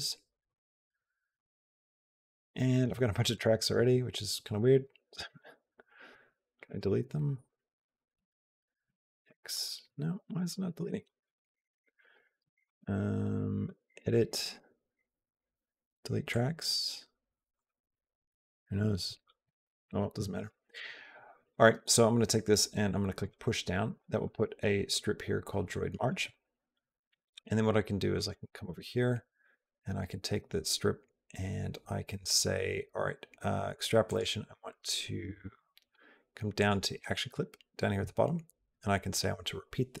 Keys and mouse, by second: 0.3 click, 2.3 click, 3.2 click, 4.7 x, 5.0 click, 6.1 x, 6.6 right click, 8.0 x, 8.7 x, 8.8 x, 9.1 click, 10.6 Delete, 10.9 click, 11.1 Delete, 11.3 click, 11.7 Delete, 11.9 right click, 13.5 click, 17.4 click, 17.7 click, 20.5 click, 23.1 click, 24.8-25.9 drag, 28.0 click, 29.3 click, 33.9 click, 39.1-40.0 drag.